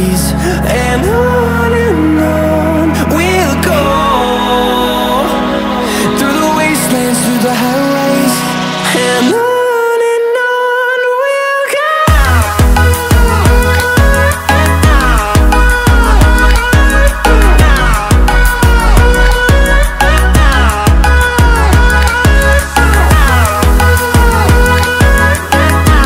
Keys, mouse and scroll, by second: 0.1 click, 1.0-2.1 typing, 3.5 click, 5.4-6.5 typing, 8.3 click, 11.9-12.4 typing, 13.9 click, 15.1-16.3 typing, 21.2 click, 24.9 2.